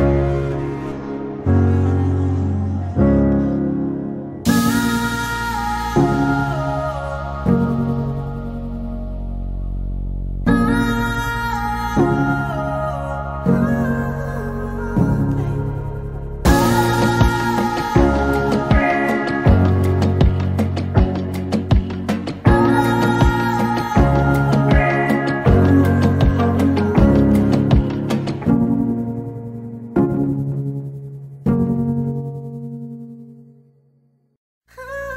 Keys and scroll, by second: 4.4 a, 10.9 p, 23.8 t, 25.6-27.2 typing, 30.9 p, 35.0-35.1 typing.